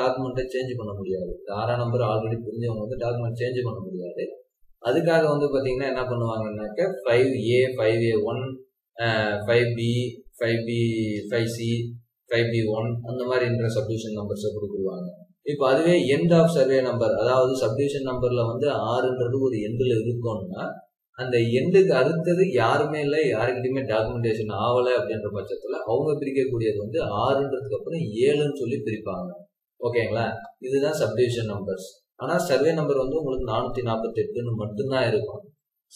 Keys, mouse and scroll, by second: 30.3-30.8 scroll down 1, 30.9-31.5 scroll up 1, 31.5-32.0 scroll down 1, 32.0-35.0 scroll up 1.